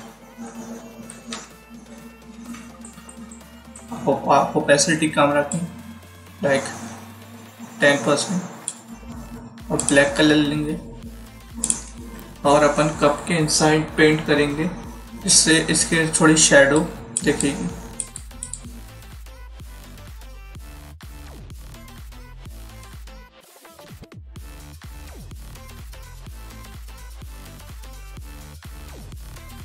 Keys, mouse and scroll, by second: 1.0-2.0 typing, 5.4 click, 16.6 click, 23.4 alt+scroll up 1, 23.5 alt+scroll down 1, 24.0 click.